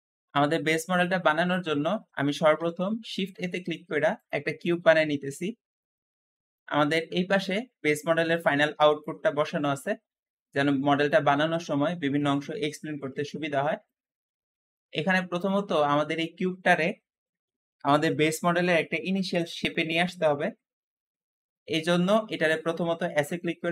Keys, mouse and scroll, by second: 1.3-2.8 shift+middle drag, 2.8 shift+a, 2.9 shift+a, 5.4-6.2 scroll down 2, 6.2 shift+middle click, 6.8 scroll down 1, 7.1-11.7 shift+middle drag, 11.7 Escape, 12.5-18.1 shift+middle drag, 21.6-22.2 scroll up 1, 22.2 middle click, 23.1 s, 23.2 s, 23.5 x, 23.6 x.